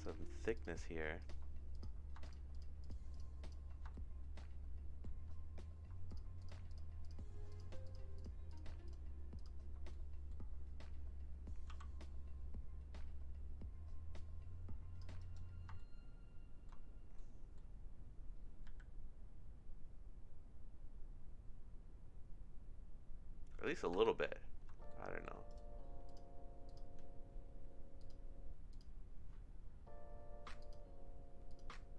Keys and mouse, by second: 0.5 shift+click, 2.2 shift+click, 2.8 shift+click, 3.9-5.2 shift+middle drag, 6.0 shift+click, 6.4 shift+click, 6.7 shift+click, 7.0 shift+click, 8.2 shift+click, 9.4 shift+click, 9.9 middle click, 11.7 c, 15.7 shift+middle click, 17.1 middle click, 18.6 e, 23.9 Tab, 24.8 shift+middle click, 25.5 right click, 26.7 click, 28.0 click, 30.7 click, 31.5 click.